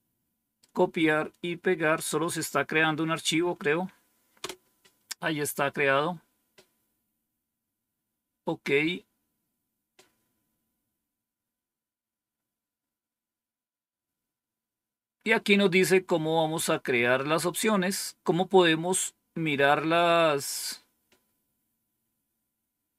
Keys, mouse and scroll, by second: 1.9-3.0 right drag, 4.3 Return, 6.4-7.8 scroll down 1.